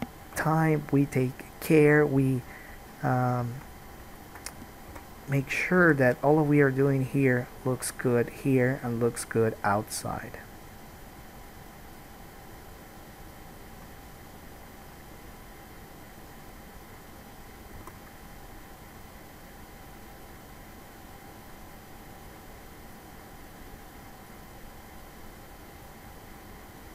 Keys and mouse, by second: 0.5 KP_3, 2.6 middle click, 2.7-5.1 right drag, 5.1-9.5 drag, 5.1 g, 6.1 alt+a, 6.5 middle click, 6.5 right click, 7.4 middle click, 7.4 right click, 8.6-9.7 middle drag, 8.6 right click, 9.7-10.8 drag, 10.8-12.8 middle drag, 12.8 click, 12.9 middle click, 13.7-16.4 drag, 16.4 middle click, 16.5-19.2 drag, 18.1 alt+a, 21.9 click, 23.1 click.